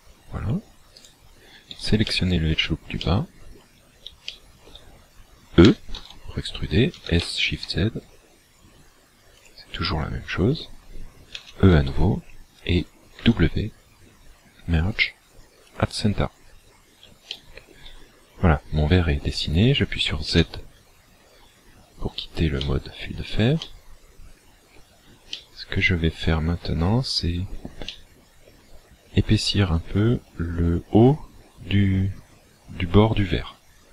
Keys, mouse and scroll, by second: 1.0 alt+right click, 2.0 shift+middle click, 3.0 middle click, 4.2 shift+middle click, 5.6 e, 6.9 s, 9.4 shift+click, 11.3 e, 13.1 w, 17.2 shift+middle click, 20.2 z, 22.6 shift+middle click, 23.7 middle click, 25.2 shift+middle click, 27.0-27.4 scroll up 2, 27.9 shift+middle click.